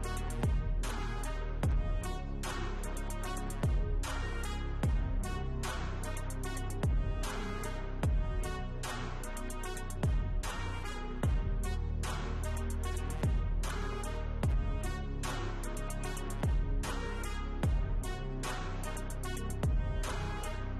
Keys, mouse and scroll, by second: 0.8-3.5 typing, 11.0 scroll down 1, 11.3 scroll up 1, 12.5-13.5 typing, 13.0-13.5 scroll up 1.